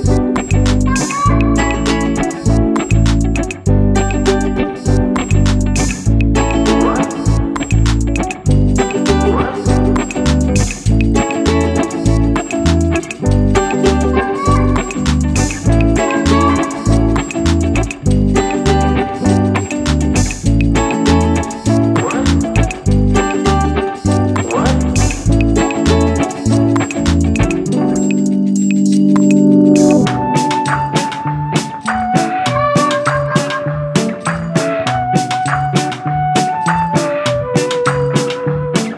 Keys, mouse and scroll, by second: 0.0 middle click, 0.3 Tab, 1.1 Delete, 2.2-3.4 middle drag, 3.4 click, 4.2 Tab, 4.5 Tab, 6.6 click, 8.4 alt+click, 8.9 alt+shift+click, 10.3-12.0 drag, 12.0-14.0 middle drag, 14.2 click, 14.6-16.5 middle drag, 16.6 Tab, 16.9 scroll down 1, 17.2-18.2 middle drag, 18.2-18.6 scroll down 1, 18.6 middle click, 19.3 click, 19.6-19.9 scroll up 2, 19.9-20.3 scroll down 1, 20.3-21.5 middle drag, 21.5 click, 22.9 click, 25.4 click, 26.3-28.4 drag, 28.7-30.0 drag, 30.3 click, 30.8 g, 32.6-33.3 scroll up 3, 33.3-35.3 middle drag, 35.9-36.4 scroll down 4, 36.4-37.7 middle drag, 37.7-38.4 scroll up 1, 38.4 click.